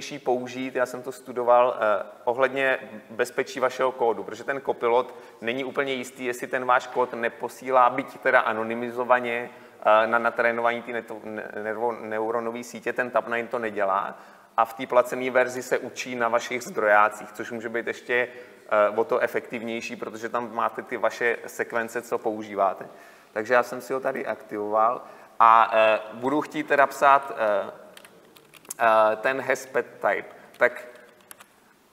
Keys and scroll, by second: 28.0 Delete.